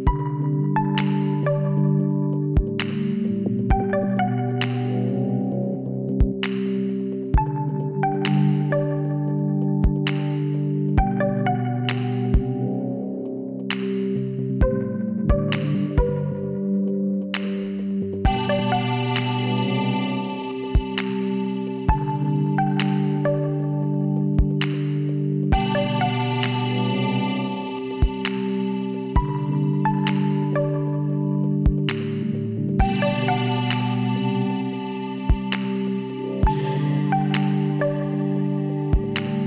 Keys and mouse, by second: 4.0 z, 4.3-7.1 drag, 7.8-9.0 middle drag, 9.0 KP_7, 11.9-13.7 drag, 14.4 l, 16.9 z, 20.1 s, 23.0 click, 23.4 z, 23.7-25.3 drag, 26.2 s, 27.7 click, 27.9 a, 28.9 middle click, 31.5 shift+s, 33.7 middle click, 38.7-39.4 middle drag.